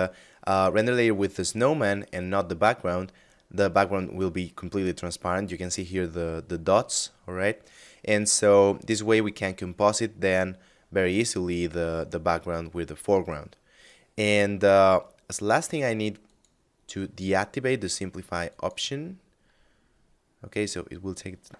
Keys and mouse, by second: 15.7 click, 16.7 middle click, 17.9 click.